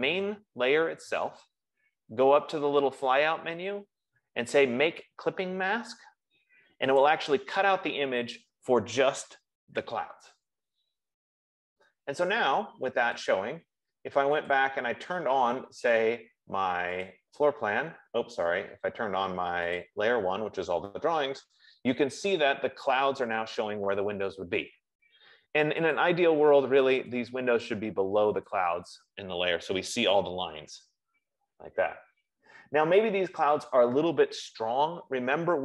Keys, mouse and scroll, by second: 0.2 click, 3.4 click, 7.4 click, 14.4 click, 15.4 click, 17.4 click, 20.3 click, 26.4 click, 27.3 F15, 28.6 click.